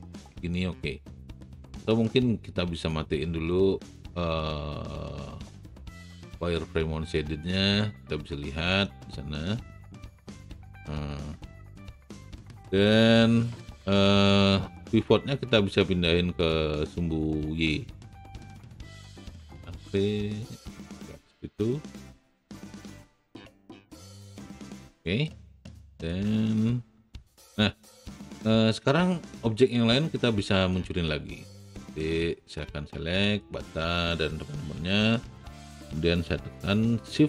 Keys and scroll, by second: 14.8 d, 19.1 v, 24.0 d.